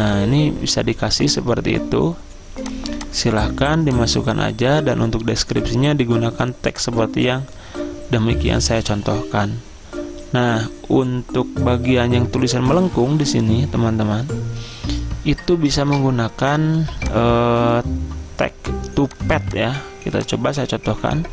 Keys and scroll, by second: 16.5 z.